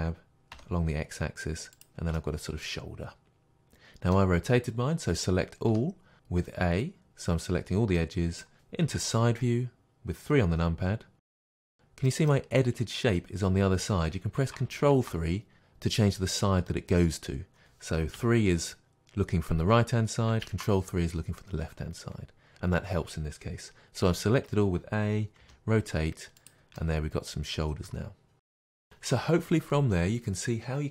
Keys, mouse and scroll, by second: 1.8 click, 2.2-15.3 middle drag, 5.7 a, 8.9 KP_3, 14.8 ctrl+KP_3, 18.2 KP_3, 20.5 ctrl+KP_3, 25.4 r, 25.6 middle click, 26.5 click, 26.8-30.9 middle drag, 28.3 scroll down 2.